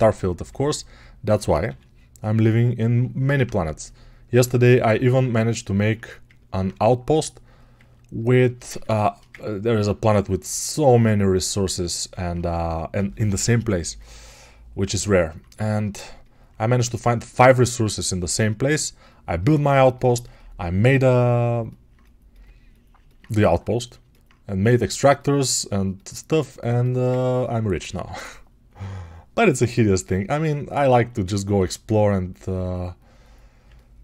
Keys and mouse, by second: 6.4-11.9 alt+drag.